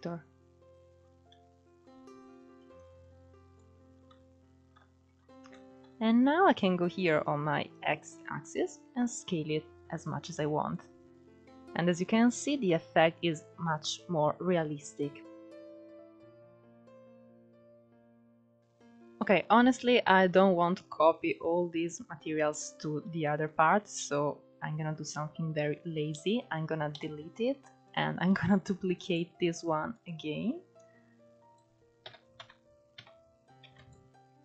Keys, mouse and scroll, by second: 1.5-2.3 scroll down 2, 2.3 scroll down 1, 2.6-3.8 drag, 3.8-4.8 middle drag, 4.8-7.6 scroll up 2, 7.6 scroll up 1, 7.8-11.2 drag, 11.2-11.7 scroll down 2, 11.7-12.7 scroll up 2, 12.7-13.7 middle drag, 13.7-14.2 scroll down 2, 14.2 middle click, 17.6 click, 18.2-18.6 scroll up 5, 18.6-19.6 scroll down 2, 19.6-20.5 scroll up 1, 22.5-22.9 scroll down 2, 22.9-23.8 shift+middle drag, 23.8 click, 26.6 Delete, 27.6 click, 28.5 shift+d, 30.5 click, 31.7 r.